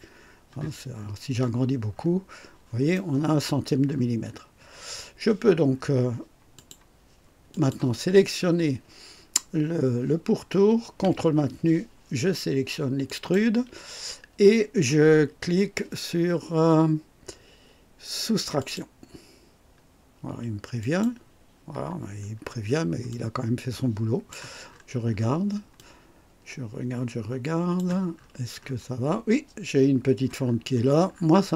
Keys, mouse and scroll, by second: 0.8-2.7 scroll up 4, 2.8-3.5 right drag, 3.8-4.8 scroll down 6, 5.6 scroll down 2, 6.4 click, 7.4 click, 13.0 ctrl+click, 18.5 click, 20.7 click, 22.3 scroll down 2, 23.0-24.4 drag, 24.6-25.3 scroll up 4, 25.7-27.9 drag, 28.1-28.8 scroll up 4, 30.3-31.5 scroll down 8.